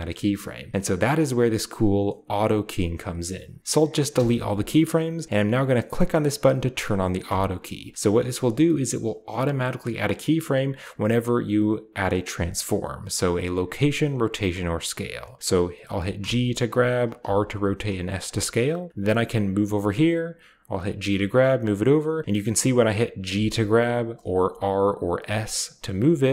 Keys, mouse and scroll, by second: 3.6 x, 4.0 x, 4.4 click, 4.8 click, 7.1 click, 16.0 g, 16.6 drag, 17.1 r, 17.4 click, 17.7 s, 18.1 click, 19.1 click, 20.8-21.6 typing, 21.5 click, 23.2 typing, 24.0 drag, 24.3-25.9 typing, 24.8 middle click, 26.2 click.